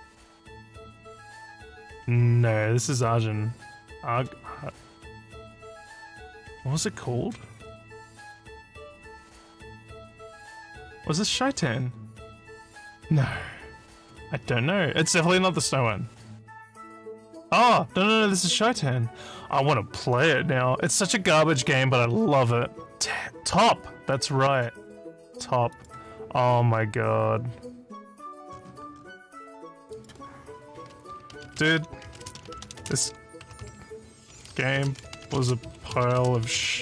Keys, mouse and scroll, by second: 7.7 scroll down 2, 8.6 middle click, 11.7 scroll up 1, 14.3 scroll up 1, 15.4 scroll down 2, 20.8 scroll down 1, 21.6 scroll down 1, 24.1 click, 25.7 click, 28.5-29.1 scroll down 6, 29.9 click, 31.1-36.8 typing.